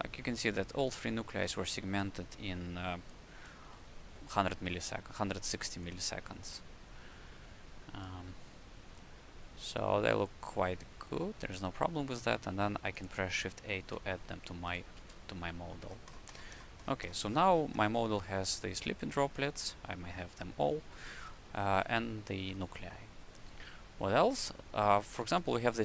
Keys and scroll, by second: 13.7 shift+a, 14.9 ctrl+space, 25.1 w.